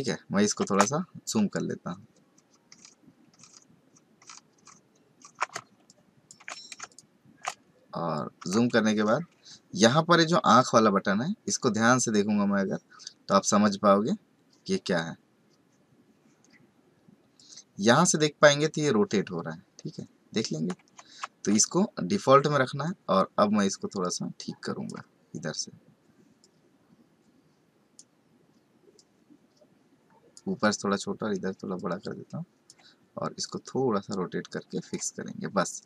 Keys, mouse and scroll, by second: 0.0 ctrl+space, 0.7 space, 1.8-4.6 alt+scroll down 17, 4.6-5.5 alt+scroll up 8, 5.8 ctrl+click, 6.7 ctrl+space, 6.8 ctrl+click, 7.3 ctrl+space, 8.9-9.5 scroll down 4, 17.4 click, 21.2 ctrl+z, 22.8 click, 26.4 click, 31.7 click, 33.4 click.